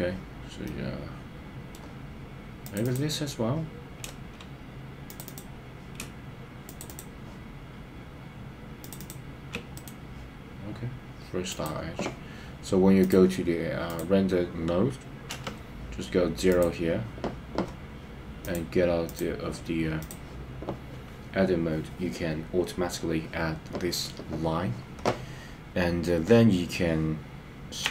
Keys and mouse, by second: 0.6-1.7 middle drag, 2.8 click, 5.2 click, 6.7 shift+click, 6.9 shift+click, 9.0 shift+click, 9.8-11.7 right drag, 15.3 KP_0, 18.5 click, 20.0 click.